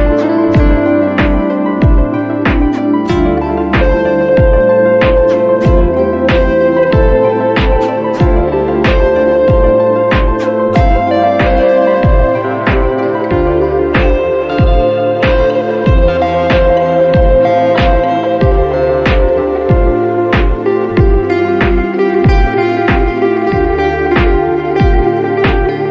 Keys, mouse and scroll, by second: 0.2 click, 4.6 click, 4.9 t, 7.2 click, 7.5 ctrl+z, 7.8-9.1 drag, 9.1 right click, 9.4 click, 13.1 click, 15.5 click, 19.8-21.0 drag, 22.7 click, 24.2 ctrl+i, 25.4 space.